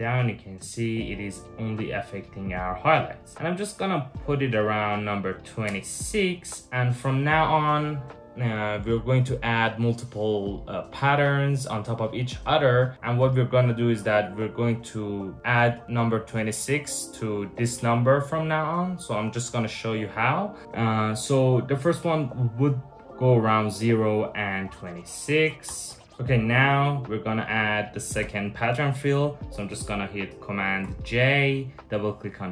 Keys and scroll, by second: 25.3 Return, 26.1 Return, 26.1 BackSpace, 30.5 super+j.